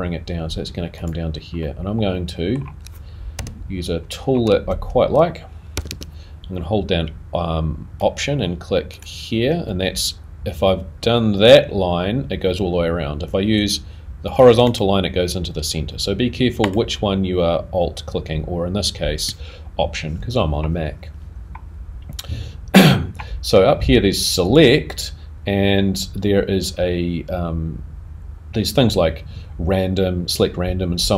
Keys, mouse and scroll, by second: 0.7 a, 0.7 g, 1.6 middle click, 4.5 scroll up 2, 4.5 shift+3, 8.0 alt+a, 9.6 alt+click, 19.2 alt+click.